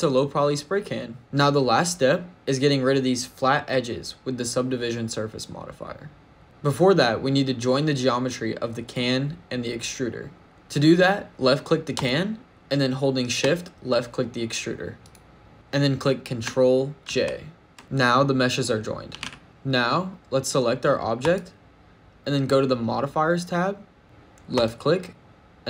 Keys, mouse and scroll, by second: 8.7 click, 10.6 click, 11.8 click, 14.9 shift+click, 16.9 ctrl+j, 17.8 shift+middle click, 17.8 click, 17.8-18.9 scroll down 1, 18.9 g, 19.0 z, 19.4 shift+middle click, 19.4 scroll up 1, 21.1 click, 25.0 click.